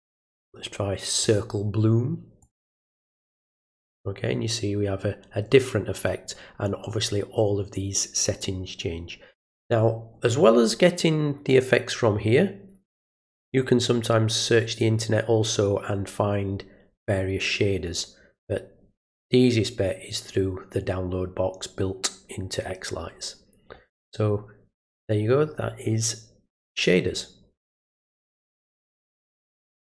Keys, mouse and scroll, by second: 1.2 click, 2.4 click, 29.8 click.